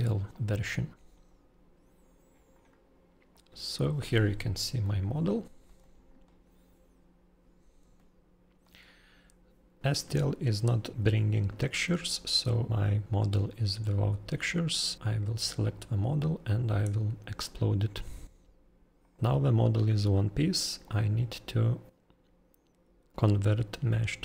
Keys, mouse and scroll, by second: 1.9-2.9 scroll down 31, 3.3 click, 4.2 scroll, 4.7 shift+u, 4.8-24.2 shift+middle click, 5.7 shift+u, 5.8 middle click, 7.8-8.8 typing, 7.9 click, 14.4 click, 14.9 click, 15.6 middle click, 19.0 click, 19.2 click, 20.8 click.